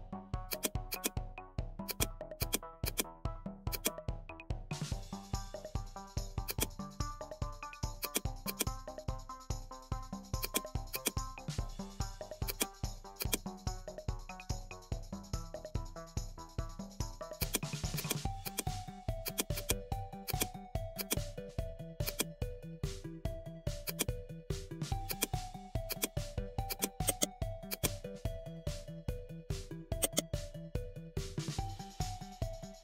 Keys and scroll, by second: 9.5 ctrl+a, 13.8 ctrl+d.